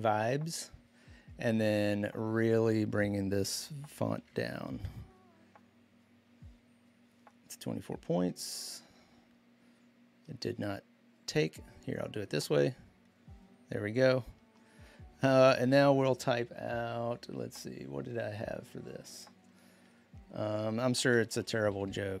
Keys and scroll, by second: 3.6-4.5 typing, 21.0-22.1 typing.